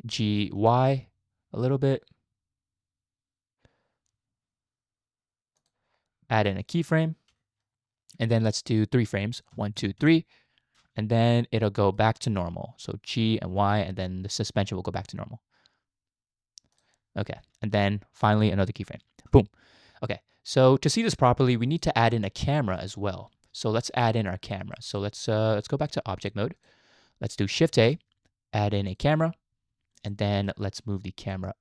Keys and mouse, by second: 0.1 g, 7.3 i, 9.2 click, 9.5 Right, 9.8 Right, 10.0 Right, 11.1-12.0 shift+middle drag, 13.1 g, 19.3 i, 20.6-21.2 drag, 21.5 click, 22.1 shift+middle click, 23.6 shift+middle click, 24.0-24.6 middle drag, 24.7 shift+middle drag, 25.0 middle click, 26.2-26.7 drag, 27.7 shift+a, 30.4 middle click, 31.4-31.6 drag.